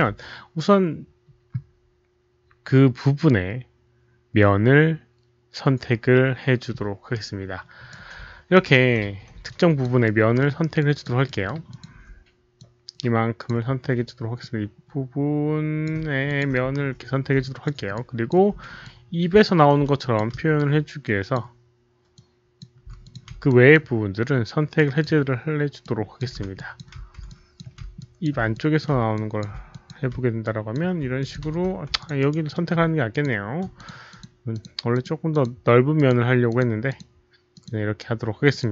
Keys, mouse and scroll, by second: 3.7 alt+right click, 3.7 alt+middle click, 3.7 click, 5.0 alt+right click, 5.0 click, 5.8 alt+right click, 7.1-7.8 alt+right drag, 7.1 alt+middle click, 8.5 alt+right click, 9.4 alt+click, 10.0 alt+middle click, 10.7 alt+click, 11.2 alt+middle click, 11.6 alt+click, 12.5 alt+click, 13.4 alt+right click, 14.3-15.8 drag, 14.7 alt+middle click, 14.7 alt+right click, 15.4 alt+right click, 16.2 alt+click, 16.6 f, 17.4 alt+click, 17.8 alt+f, 17.8 alt+middle click, 17.9 alt+click, 18.8 ctrl+f, 18.8-19.4 ctrl+alt+drag, 18.8 alt+middle click, 19.9-21.3 ctrl+alt+drag, 21.8 ctrl+f, 22.1-22.5 ctrl+drag, 23.0 ctrl+alt+click, 23.4 ctrl+drag, 24.7 ctrl+f, 24.7 ctrl+click, 25.7-26.1 ctrl+drag, 26.5 ctrl+alt+click, 27.2 ctrl+alt+click, 27.9 ctrl+click, 28.5 ctrl+alt+drag, 29.1 ctrl+click, 29.6 alt+click, 30.4 ctrl+drag, 31.1 alt+click, 31.9 alt+z, 31.9 ctrl+alt+click, 32.1 alt+right click, 32.5 alt+middle click, 33.0 ctrl+click, 33.7 shift+click, 34.0 shift+click, 34.5 shift+click, 34.8 shift+click, 35.2 shift+click, 35.9 shift+click, 36.4 shift+click, 36.8 shift+click, 37.5 shift+click, 38.4 shift+click.